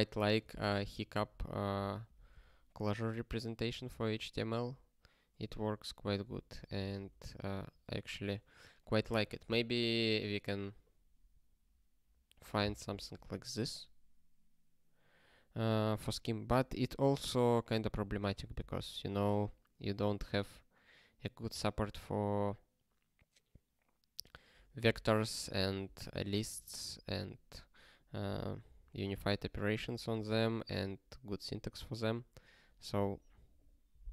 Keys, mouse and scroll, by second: 0.1-2.9 typing, 3.8 ctrl+space, 4.4 ctrl+a, 5.5 ctrl+g, 6.3 ctrl+e, 6.6 alt+b, 6.7 alt+b, 7.5 alt+f, 8.2 ctrl+k.